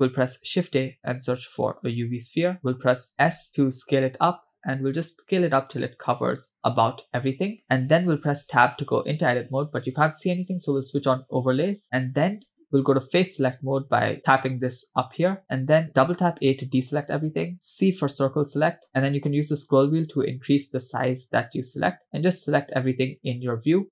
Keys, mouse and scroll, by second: 0.0 shift+a, 3.2 s, 9.5 Tab, 11.2 click, 13.4 click, 16.4 a, 18.2 c.